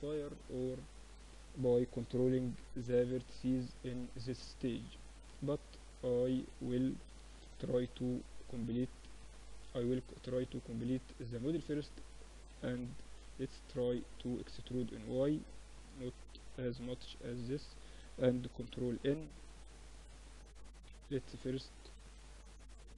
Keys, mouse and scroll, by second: 0.6-1.8 middle drag, 1.2 KP_1, 1.8 KP_3, 4.1 Tab, 5.0 Tab, 5.6 Tab, 6.4 ctrl+alt+shift+c, 8.3 ctrl+z, 8.8-11.8 middle drag, 9.0 Tab, 10.5 a, 10.6 a, 11.4 e, 13.3 z, 14.8-16.0 drag, 16.0 middle click, 16.4 a, 16.9-19.1 middle drag, 17.0 a, 17.4 ctrl+n, 17.8 Tab, 19.1 Tab, 20.0 KP_1, 21.0 KP_3.